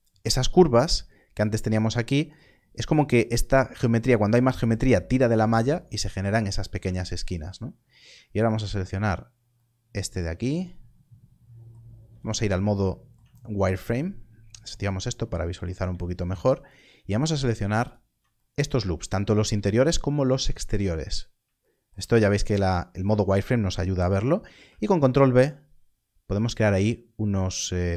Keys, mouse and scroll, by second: 6.2-6.7 scroll down 1, 8.4 alt+click, 14.6 click, 17.5 alt+shift+click, 19.3 scroll down 1, 24.6 ctrl+b.